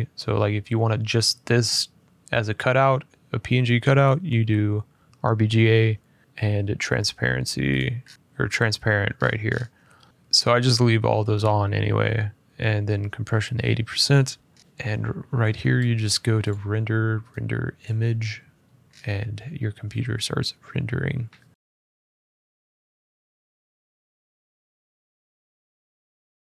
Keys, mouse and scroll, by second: 7.5 click, 7.8-8.2 scroll, 8.9-9.8 scroll, 10.1 click, 14.2-15.5 scroll, 15.5-15.9 scroll, 16.2 click, 17.0 middle click, 17.6 click, 18.6-19.1 scroll, 19.6-19.9 scroll, 20.7 middle click, 21.2 middle click.